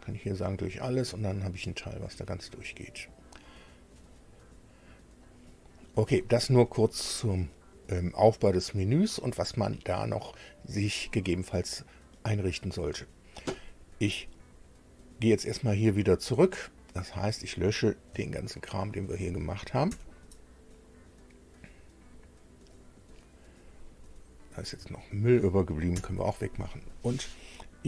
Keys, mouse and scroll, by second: 0.5 click, 1.3-5.3 middle drag, 5.3 click, 17.2 click, 18.7 shift+click, 19.9 Delete, 22.7 click, 23.0-24.5 middle drag, 24.5 click, 24.7 shift+middle click, 25.1 shift+click, 25.9 Delete.